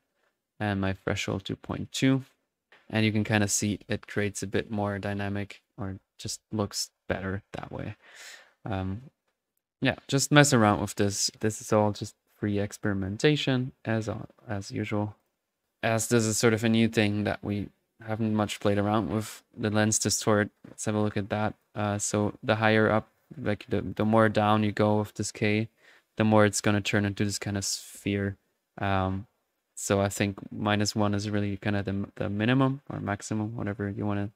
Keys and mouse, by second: 1.4 click, 3.0-6.4 drag, 6.1-6.9 typing, 6.5-9.2 ctrl+middle drag, 9.2-10.8 drag, 10.8-12.3 middle drag, 11.5-12.9 drag, 12.3-13.4 typing, 13.1-14.3 ctrl+drag, 14.3 ctrl+middle click, 15.2-15.5 drag, 16.3 middle click, 17.8-19.7 middle drag, 20.0-34.3 drag.